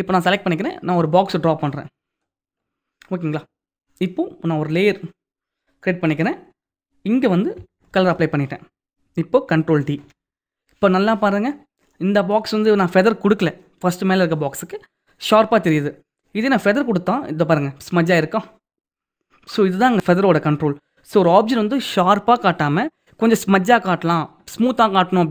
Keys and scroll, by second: 7.5 alt+BackSpace, 9.5 ctrl+d.